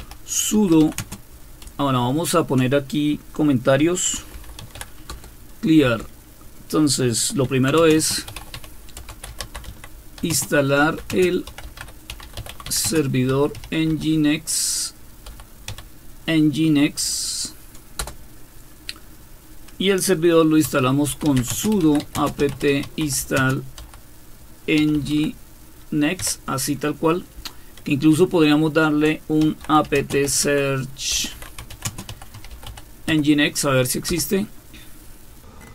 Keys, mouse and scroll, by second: 0.0-2.5 typing, 3.9-5.3 typing, 5.8 Return, 7.2-15.7 typing, 18.0 Return, 20.4-33.6 typing, 34.1 Return.